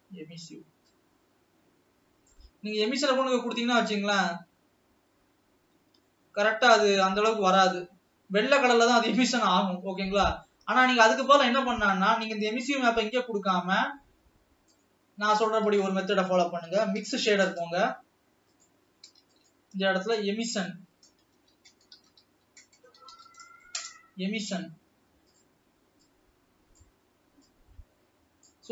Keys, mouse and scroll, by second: 1.3 click, 6.2-8.3 middle drag, 8.3 scroll up 2, 9.8-10.8 scroll down 3, 13.0 click, 13.6 scroll down 1, 13.8-15.5 middle drag, 15.5 click, 20.3 shift+a, 26.3-26.8 drag, 27.7-28.7 drag.